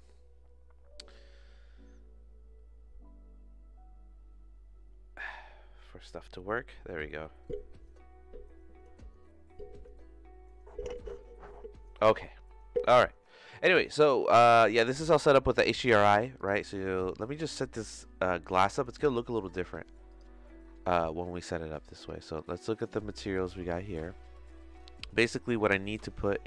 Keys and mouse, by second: 14.9 click, 16.4-17.4 drag, 17.9 click, 19.0-20.2 drag, 22.4 middle click, 23.2 middle click, 24.9 middle click, 26.2 middle click.